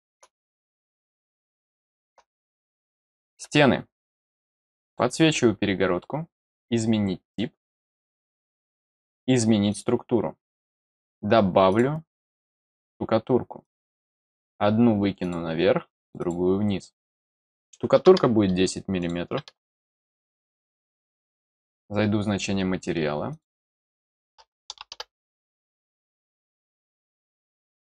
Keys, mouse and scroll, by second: 1.0 middle click, 1.6 middle click, 2.3 middle click, 2.9-3.3 scroll down 1, 4.8 click, 6.4 click, 9.6 click, 11.6 click, 12.5 click, 13.6 click, 15.2 click, 15.9 click, 16.1 click, 17.0 click, 18.9 click, 21.1 click, 23.3 click.